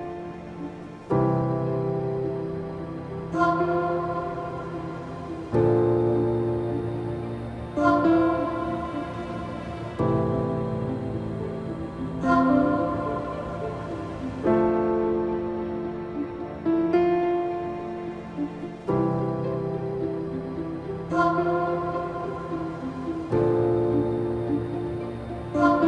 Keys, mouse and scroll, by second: 2.5 click, 4.7 click, 5.6 alt+scroll down 1, 6.2 alt+scroll up 1, 8.1 scroll up 1, 9.5 alt+scroll down 1, 12.4 alt+scroll up 1, 15.1 click, 18.8 click, 21.5-25.8 drag.